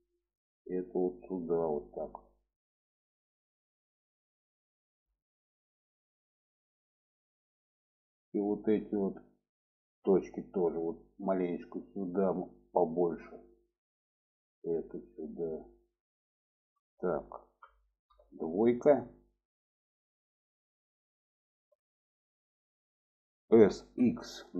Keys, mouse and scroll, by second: 0.7 click, 2.7-3.3 middle drag, 3.7-4.9 middle drag, 5.2 shift+middle click, 5.9 shift+middle click, 6.7 shift+middle click, 7.3 shift+middle click, 8.8 click, 10.3-12.8 drag, 13.0 shift+middle click, 13.9 click, 14.9-15.9 drag, 16.4 shift+middle click, 17.5 2, 18.6 click, 19.6-22.0 middle drag, 22.6 shift+middle click, 23.5 s.